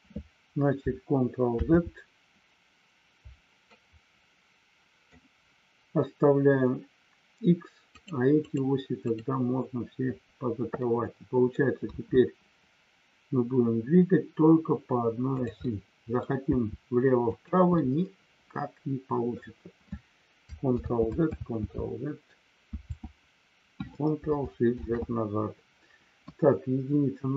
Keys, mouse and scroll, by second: 3.6-5.2 middle drag, 7.9 click, 8.3 click, 9.0 click, 10.9 middle click, 15.6 middle click, 17.2 click, 17.8-19.3 middle drag, 20.9 ctrl+z, 21.4 ctrl+z, 22.8 ctrl+z, 24.9 ctrl+shift+z, 26.2 KP_1.